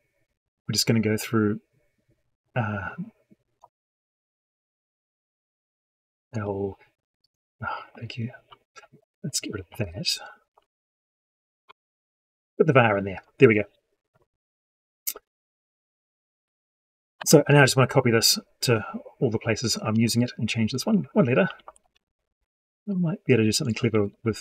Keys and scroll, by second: 9.5 ctrl+y, 17.0 ctrl+c, 19.7 ctrl+v, 23.8 ctrl+v.